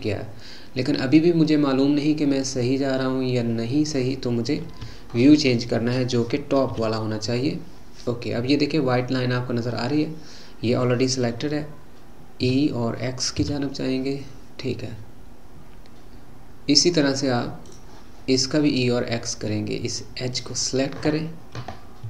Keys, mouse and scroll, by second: 6.7 KP_7, 9.0-10.2 scroll up 2, 10.2-12.2 scroll up 1, 12.4 e, 20.3 click.